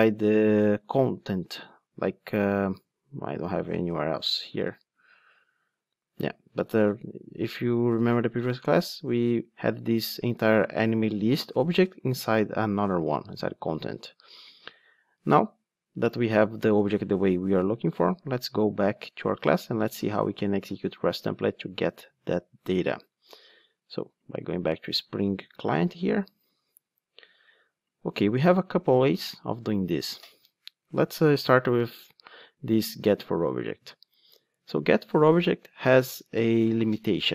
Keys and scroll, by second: 28.8 super+c, 34.4 super+x.